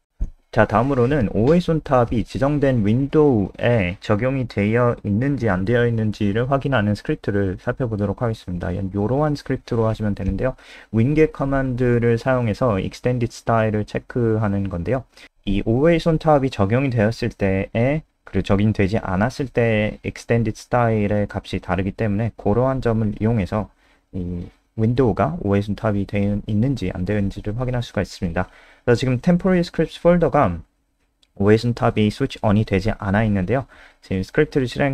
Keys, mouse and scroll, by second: 2.9 click, 3.2 alt+F4, 4.9 scroll down 2, 5.2 click, 6.6 ctrl+c, 6.8 click, 8.7 shift+Down, 9.1 ctrl+v, 9.3 ctrl+s, 9.3 click, 12.3 F3, 13.8 click, 28.0-28.3 scroll down 1, 29.8 click, 30.1 F5.